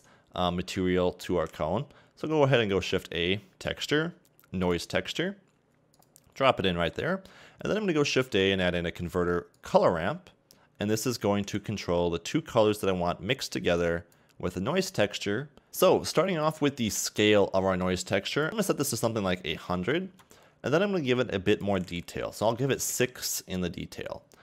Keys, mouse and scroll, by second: 15.7 click.